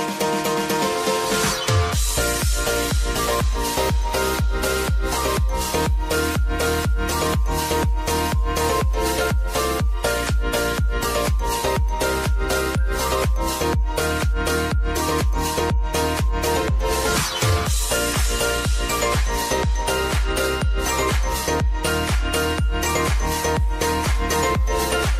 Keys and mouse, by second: 4.7 click, 8.2 click, 13.2 click, 19.4 ctrl+alt+Home, 21.1-25.1 drag.